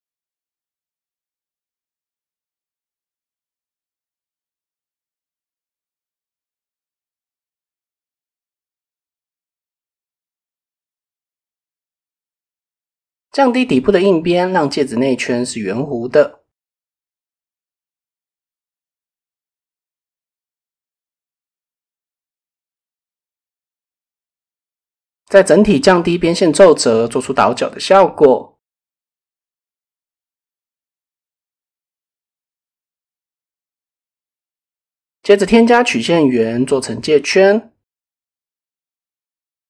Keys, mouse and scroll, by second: 0.3 shift+middle click, 1.4 middle click, 3.4 ctrl+r, 5.5 click, 6.8 ctrl+r, 7.8-8.8 drag, 8.8 KP_1, 10.4 click, 11.3-12.4 drag, 13.2-14.2 drag, 15.8 middle click, 16.8 middle click, 18.3 click, 19.7 middle click, 20.2 middle click, 21.1 middle click, 22.0 middle click, 23.6 a, 26.2 click, 26.8 middle click, 27.0 Tab, 27.3 middle drag, 27.9 middle click, 28.4 KP_7, 29.2 shift+middle drag, 34.0 KP_1, 34.8 shift+click, 35.2 shift+a, 39.3-39.6 drag.